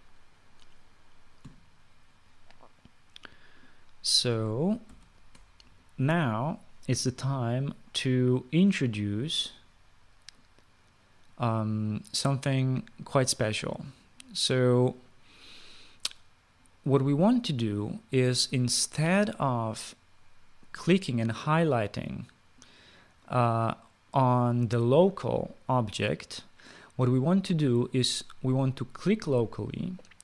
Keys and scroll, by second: 5.6 ctrl+s.